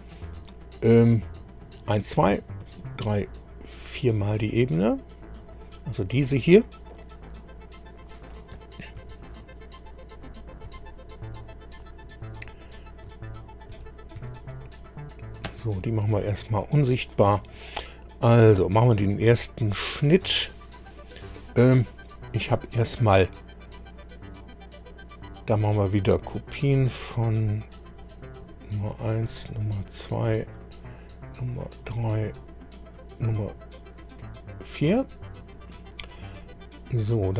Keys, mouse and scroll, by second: 5.4 click, 9.0 ctrl+c, 10.7 ctrl+v, 12.5-12.9 ctrl+scroll down 3, 13.7 ctrl+v, 14.2 ctrl+v, 14.8 ctrl+click, 15.5 space, 17.1 click, 21.9 click, 26.6 click, 27.7 click, 29.0 click, 30.4 click, 31.6 click, 32.8 click, 34.1 click, 36.5-36.8 scroll down 1.